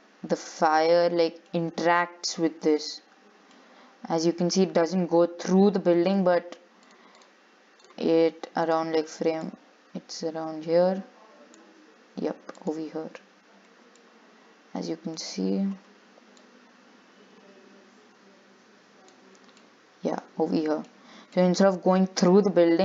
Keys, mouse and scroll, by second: 1.1 shift+middle click, 1.9-2.3 scroll up 4, 2.3 middle click, 3.2-3.8 scroll up 5, 3.8-6.4 middle drag, 6.4-7.2 scroll up 1, 7.2-14.2 drag, 14.2-15.7 middle drag, 15.7 scroll down 3, 16.6-19.8 drag, 19.8-21.1 middle drag, 21.1-21.5 scroll up 5, 21.5-22.8 middle drag.